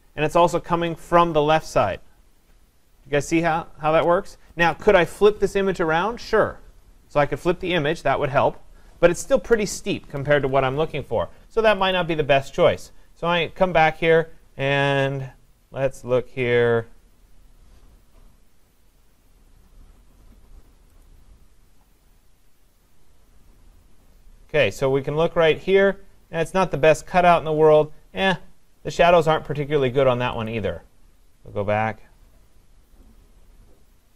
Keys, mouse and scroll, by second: 11.9 click, 14.2-15.1 scroll, 15.1-15.7 scroll down 8, 15.7-16.0 scroll down 3, 16.4-17.5 scroll down 7, 17.5-19.6 scroll down 11, 19.6-20.4 scroll down 2, 20.4-21.0 scroll down 1, 21.1 click, 22.7-24.3 scroll down 4, 24.3-24.7 scroll down 2, 28.1-29.4 scroll up 5, 30.5 click, 31.9-32.6 scroll down 6, 32.6-33.9 scroll down 8.